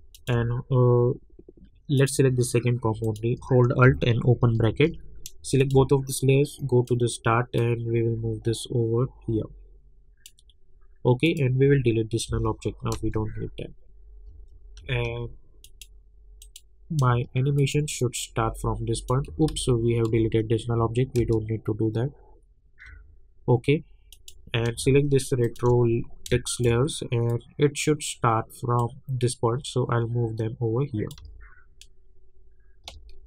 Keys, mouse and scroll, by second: 0.1 shift+click, 4.4 alt+[, 5.6 shift+click, 6.6-11.2 drag, 12.9 space, 15.6 click, 17.6 shift+click, 18.4-19.2 drag, 19.6 ctrl+z, 21.2 space, 24.1 click, 25.4 shift+click, 26.5 shift+click, 27.3-31.2 drag, 31.2 space.